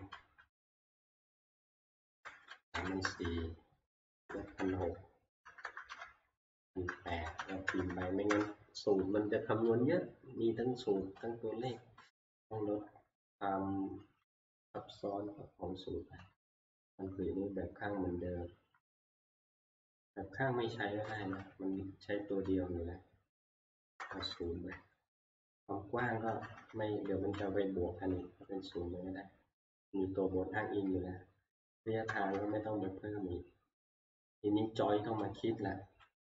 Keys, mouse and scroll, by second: 1.6-6.1 typing, 7.6-8.4 typing, 11.7-12.4 typing, 16.3-16.7 scroll, 17.2-18.0 scroll, 24.0 shift+0, 24.2 Return, 26.3 0, 26.5 Return, 27.1 Up, 28.2 Down, 31.6 Up, 32.1 Up, 32.1 0, 32.3 Return, 35.7 Up.